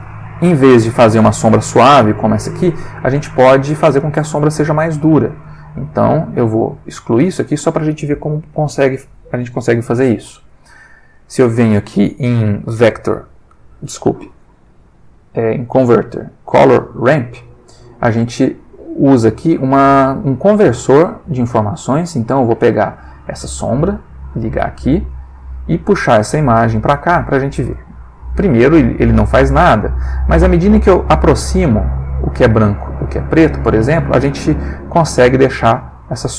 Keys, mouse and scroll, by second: 0.8-1.5 drag, 3.2 click, 6.4 click, 6.7 x, 10.5 shift+a, 16.8 click, 18.0 click, 19.1-21.6 drag, 23.4-24.9 drag, 25.1-25.7 drag, 26.1-27.4 drag, 27.7 click, 30.5-32.0 drag, 32.8-33.7 drag, 35.3 click.